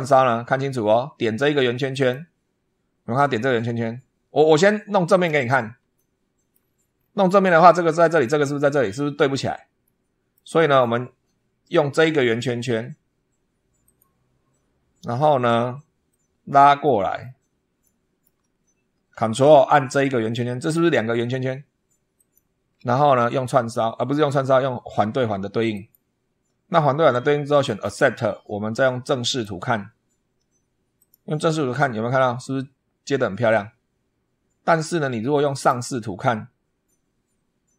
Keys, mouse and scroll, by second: 1.7 click, 4.9 click, 5.8-6.5 shift+middle drag, 6.8 shift+scroll down 3, 9.7 middle click, 10.5 click, 10.9 scroll up 2, 13.7 click, 15.9 shift+middle click, 17.0-17.3 shift+scroll down 2, 17.7 shift+middle click, 18.3-18.9 shift+scroll up 1, 22.0 ctrl+click, 25.5 click, 27.5 click, 29.1 click, 30.8 click, 31.5-31.9 scroll up 2, 35.4 click, 36.5 scroll up 2.